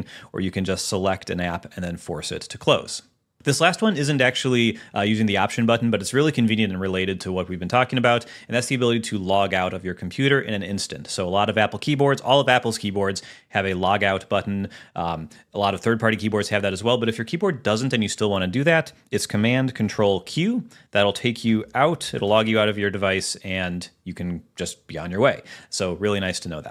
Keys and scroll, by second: 20.4 ctrl+super+q.